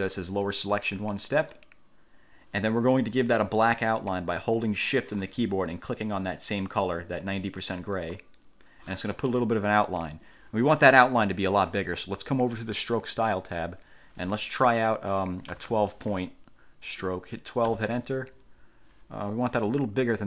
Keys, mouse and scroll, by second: 1.6 click, 8.1 shift+click, 13.1 click, 15.4-16.4 typing, 17.9 Return.